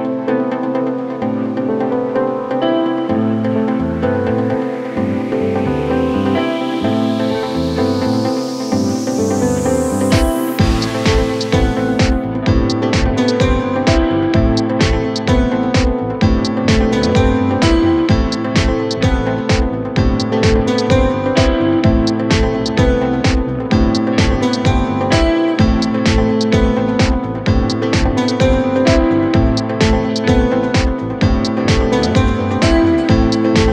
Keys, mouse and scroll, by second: 0.8 space, 6.9 ctrl+y, 7.4 ctrl+t, 12.2 ctrl+t, 17.6 Return, 32.9 shift+Up, 33.6 shift+Left.